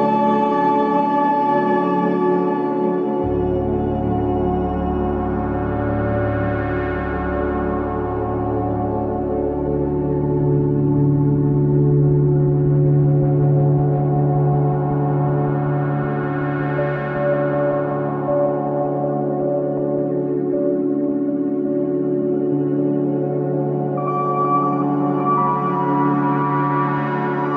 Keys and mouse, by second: 2.0 shift+d, 8.6-9.1 middle drag, 10.4-10.8 middle drag, 11.2 ctrl+s, 12.4 shift+a, 20.6 click, 23.4 alt+z, 24.0 click, 24.7 g.